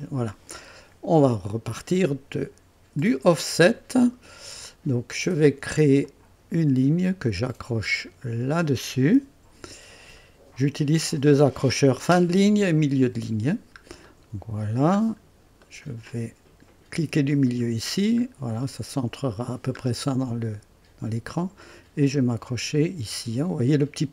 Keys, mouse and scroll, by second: 3.0 click, 6.0 click, 8.4 click, 8.7 typing, 10.2 right click, 13.5-13.8 scroll down 1, 14.0 right click, 15.0 scroll down 1, 15.6 right click, 17.3 middle click, 17.9-18.2 scroll up 1, 18.6 right click.